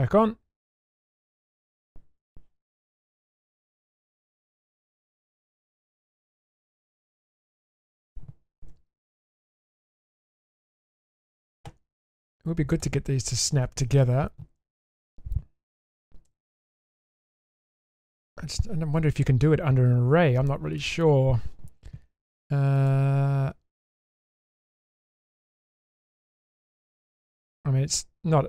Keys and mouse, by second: 1.5 click, 2.2 click, 3.0-4.1 middle drag, 5.6 shift+middle click, 6.4 middle click, 7.1 shift+middle click, 7.5 shift+middle click, 7.8 shift+middle click, 8.7 1, 9.1 middle click, 10.7 click, 11.0 middle click, 16.2 g, 17.9 middle click, 23.9-25.0 middle drag, 27.0 shift+click.